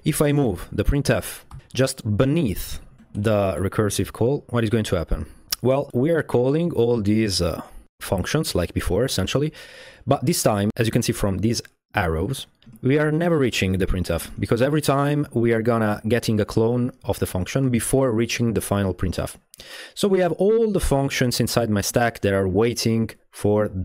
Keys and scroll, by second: 0.4 BackSpace, 0.9 BackSpace, 1.5 super+v, 3.0 Tab, 3.0 BackSpace, 3.5 BackSpace, 12.7-14.4 typing.